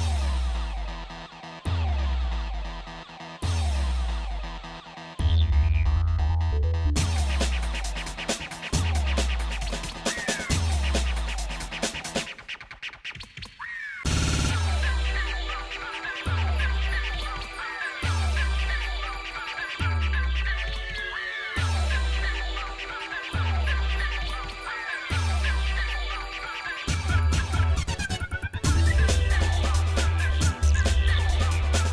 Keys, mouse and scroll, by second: 0.9 shift+middle click, 2.0 g, 5.6-7.0 shift+middle drag, 8.8 shift+click, 9.0 shift+middle click, 10.3 g, 16.0 shift+click, 17.2 g, 19.9-21.7 shift+middle drag, 22.1 middle click, 22.8 click, 23.7 g, 27.6 shift+middle click, 28.2-30.0 shift+middle drag, 30.2 scroll down 2, 30.3 scroll up 1, 30.6 middle click, 31.1 shift+middle click, 31.6 middle click.